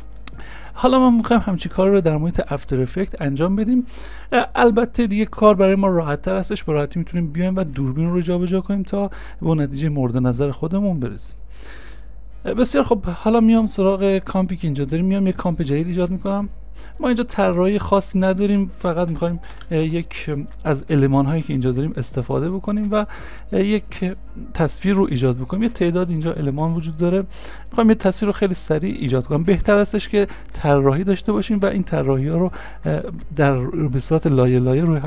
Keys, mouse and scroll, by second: 0.0 space, 19.1-19.9 typing.